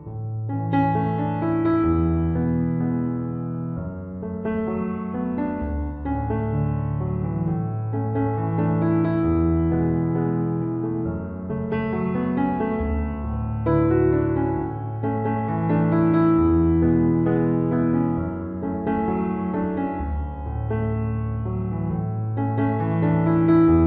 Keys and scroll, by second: 1.4 ctrl+-, 7.2 ctrl+-, 7.8 ctrl+=, 11.4 ctrl+-, 11.8 ctrl+=, 20.9 ctrl+=.